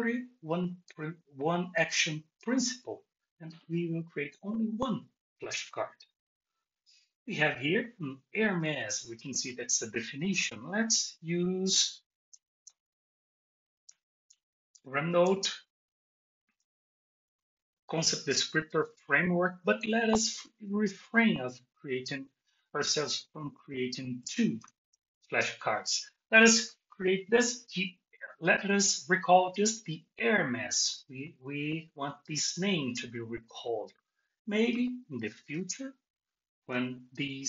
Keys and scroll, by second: 13.8 BackSpace, 24.6 shift+super+g.